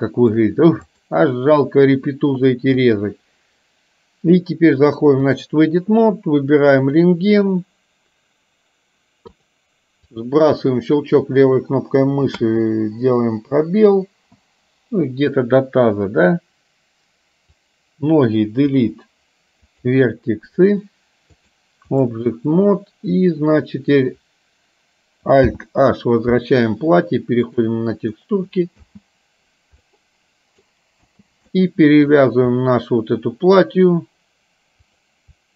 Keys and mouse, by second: 0.0 shift+middle click, 1.0 click, 2.8-5.7 drag, 9.5 click, 10.1-17.7 drag, 18.8 Delete, 21.5 click, 25.5 alt+h, 27.6 click, 29.0 space, 30.1 middle click, 31.2 space, 31.7 middle click, 35.0 click.